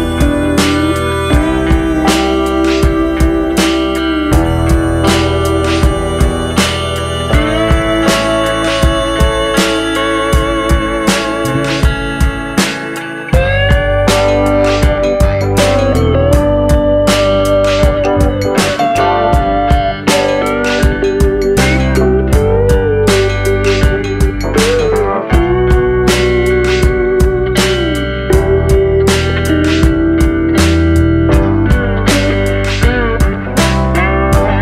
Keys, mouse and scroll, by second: 0.0 click, 0.5-0.8 scroll down 2, 0.8-1.6 shift+middle drag, 1.6 scroll up 2, 1.9-3.2 shift+middle drag, 3.2 click, 5.1 click, 5.9-6.3 middle drag, 6.3-6.8 scroll up 2, 6.8-7.9 middle drag, 7.9-10.0 drag, 10.6-11.0 scroll down 2, 11.0 middle click, 11.9 s, 13.2-13.8 scroll up 2, 13.8 click, 14.8 shift+middle drag, 15.0-15.4 scroll up 2, 15.4-16.2 shift+middle drag, 16.2 s, 17.0-17.4 middle drag, 17.4-17.7 scroll up 2, 17.7-18.3 shift+middle drag, 18.3-19.5 drag, 19.5 s, 20.4 shift+middle click, 20.7-21.4 scroll up 2, 21.4-23.5 drag, 23.9 s, 24.7-25.1 middle drag, 25.1-25.5 scroll down 2, 25.5 shift+middle click, 25.8-26.4 scroll up 2, 26.4 click, 27.5-28.3 middle drag, 28.3-29.1 scroll up 2, 29.1-30.3 scroll up 1, 30.5-32.6 drag.